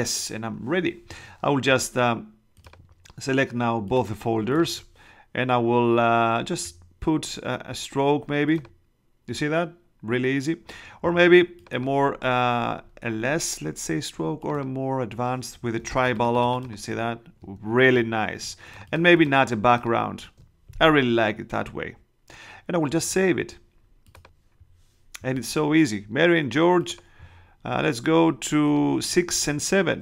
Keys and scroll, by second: 15.7 space, 29.9 6.